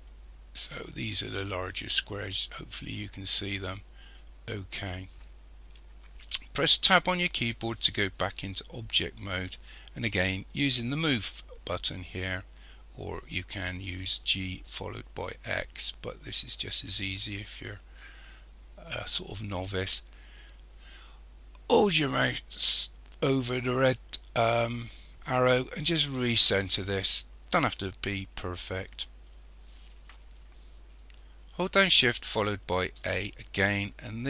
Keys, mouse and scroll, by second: 6.9 Tab, 12.0 click, 21.0 click, 33.0 shift+a.